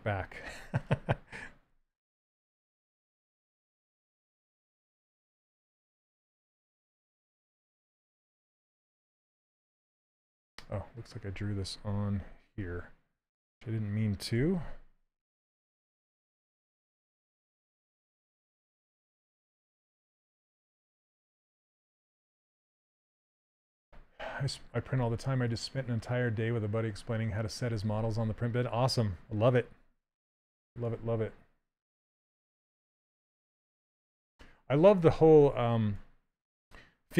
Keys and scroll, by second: 9.5 shift+f, 12.7 ctrl+z, 14.0 2, 17.1 Down, 35.1 s.